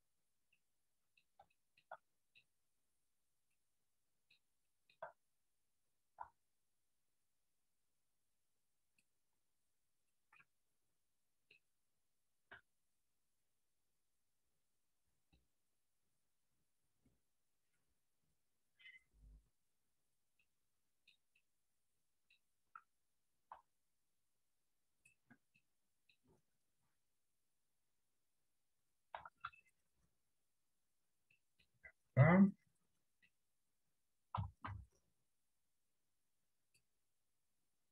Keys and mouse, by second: 0.6 middle click, 1.6 shift+middle click, 2.1 middle click, 2.9 click, 4.0 middle click, 5.0 shift+middle click, 6.3 r, 8.4 click, 9.5 r, 10.6-11.7 middle drag, 12.6 r, 14.2 click, 16.2-18.4 drag, 18.7 r, 20.6 middle click, 21.6 middle click, 23.6 r, 25.7 middle click, 27.0 click, 29.2 r, 31.4 middle click, 32.4-33.4 middle drag, 34.4 r.